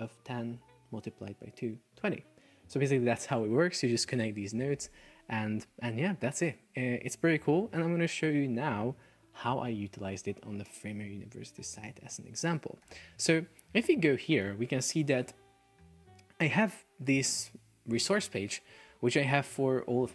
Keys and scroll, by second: 13.1 super+s, 14.5 super+s.